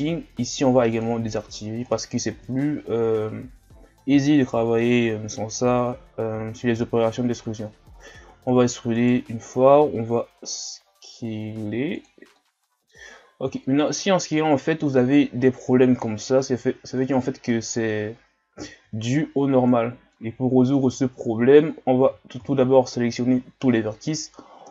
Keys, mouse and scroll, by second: 1.0 click, 1.6 scroll down 1, 1.9 middle click, 2.5 shift+scroll up 1, 3.2 scroll up 1, 7.1-8.1 shift+scroll up 1, 8.4 e, 9.7 s, 12.4 middle click, 13.1-13.6 scroll up 1, 13.6-14.0 scroll down 1, 14.0 middle click, 14.6-17.0 scroll up 1, 17.0-17.5 scroll down 1, 17.5-18.9 middle drag, 18.9-19.8 shift+scroll down 3, 19.8 scroll down 2, 20.2 middle click, 20.8-21.1 scroll up 2, 22.0 a, 22.4 a, 23.1 scroll down 2, 24.1-24.7 scroll down 1.